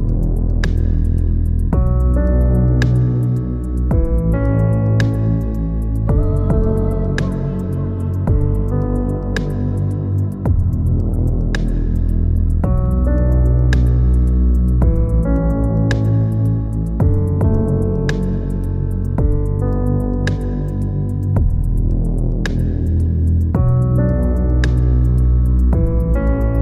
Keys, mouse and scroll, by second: 5.6 click, 6.4 click, 9.3 e, 12.1 m, 13.5 middle click, 14.4 click, 15.2 e, 16.2 m, 17.7-19.8 middle drag, 19.8 click, 21.0 alt+shift+click, 22.0 ctrl+KP_Add, 23.2 a, 24.0-25.2 scroll up 1, 25.2 a, 25.5 a, 25.7 click, 26.5 ctrl+KP_Add.